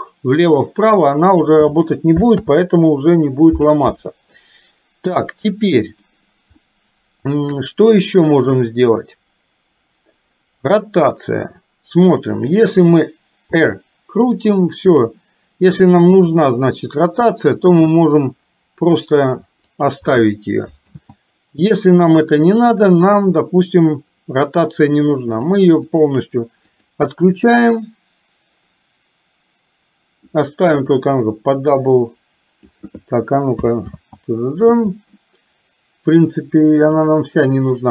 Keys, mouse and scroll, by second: 2.4 ctrl+z, 4.4-6.1 middle drag, 6.6-8.6 middle drag, 11.1-12.6 middle drag, 13.6 r, 20.9 ctrl+z, 25.4 click, 26.0 click, 26.8 click, 31.0-32.9 drag, 33.9 ctrl+z.